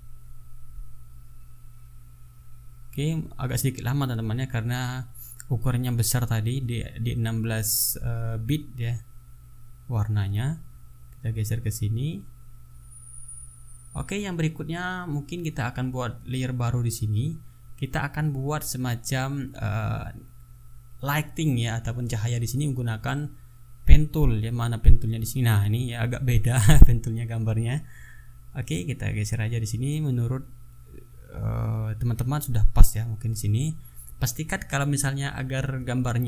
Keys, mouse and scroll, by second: 3.4-7.0 drag, 7.1-7.4 ctrl+scroll down 2, 7.7 ctrl+scroll up 2, 8.5 ctrl+scroll down 2, 8.8 ctrl+scroll up 2, 9.8-11.6 shift+drag, 11.7-12.4 ctrl+shift+scroll down 4, 15.0 click, 16.8 click, 17.9-18.3 ctrl+scroll up 2, 18.5 ctrl+scroll down 2, 25.3 click, 28.3 click, 28.9-30.8 drag, 30.9 ctrl+z, 31.8 ctrl+z, 32.3 ctrl+click, 32.9-34.5 drag, 35.3-36.2 drag.